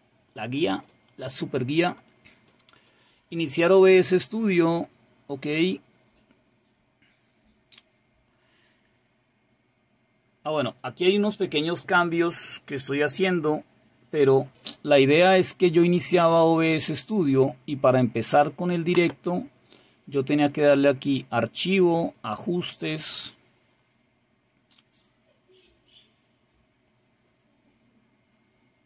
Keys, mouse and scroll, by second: 17.1 click, 20.5 click, 21.9 click.